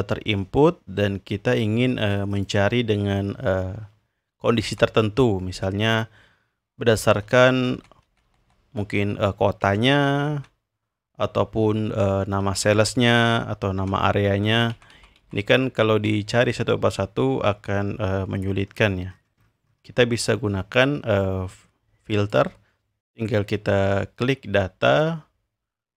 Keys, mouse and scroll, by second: 2.3 click, 4.6 Right, 7.0 Right, 7.2 Right, 7.4 Right, 7.6 Right, 7.7 Right, 8.0 Right, 8.2 Right, 8.4 Right, 9.8 Down, 10.2 Right, 10.3 Right, 12.4 Right, 13.7 Right, 14.3 Left, 14.5 Left, 14.9 Left, 15.2 Left, 16.9-17.9 scroll down 2, 18.0-18.7 scroll down 2, 18.7-19.1 scroll down 1, 19.1-20.6 scroll up 2, 21.2-22.4 drag, 24.8 click.